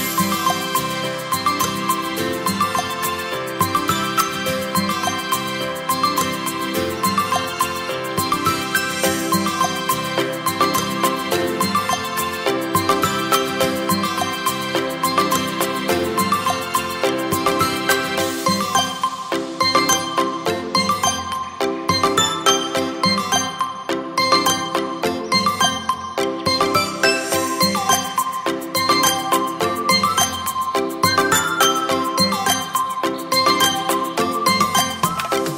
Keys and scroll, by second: 1.9 ctrl+BackSpace, 8.9 9, 11.8 8, 13.9 8, 18.7 z, 20.4 v.